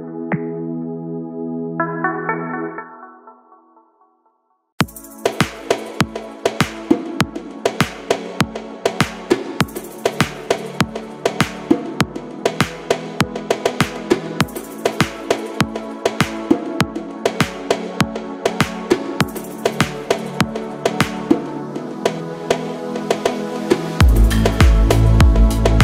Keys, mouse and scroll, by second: 0.9-2.1 drag, 2.6-3.8 drag, 4.7 click, 7.1-9.1 drag, 12.2 click, 12.8-13.7 scroll down 2, 13.7-15.4 middle drag, 20.4 click, 21.6 KP_1, 22.2-23.4 scroll up 3, 24.8 g.